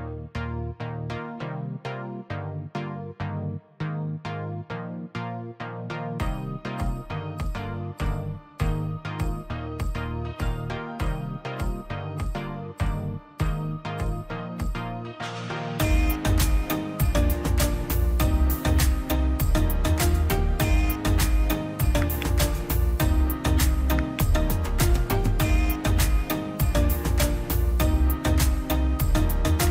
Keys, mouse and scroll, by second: 0.5 Delete, 1.0 scroll down 1, 1.5 scroll up 1, 1.6 middle click, 2.4-2.9 scroll up 1, 3.1 l, 3.9 click, 4.6-5.5 scroll down 1, 5.5 p, 5.7 click, 6.4 scroll down 1, 6.9 click, 8.0 scroll down 1, 8.2 middle click, 9.2 click, 10.3 scroll down 1, 10.5 middle click, 10.9 scroll up 1, 11.2-12.7 middle drag, 12.7-13.5 scroll up 1, 13.5 l, 13.7-14.2 scroll up 1, 14.2 click, 17.0 space, 17.2 click, 17.9 right click, 18.4 click, 19.0 scroll down 1, 19.8 p, 20.2 space, 20.3 click, 20.9 p, 21.1 click, 21.3 scroll down 1, 21.7 middle click, 22.3 click, 23.1 scroll down 1, 23.2 middle click, 23.9 scroll down 1, 24.1 middle click, 24.5 middle click, 25.2 click, 25.8 scroll down 1, 26.1-27.3 middle drag, 27.3-27.9 scroll up 1, 27.9 middle click, 28.5 middle click, 29.2 middle click.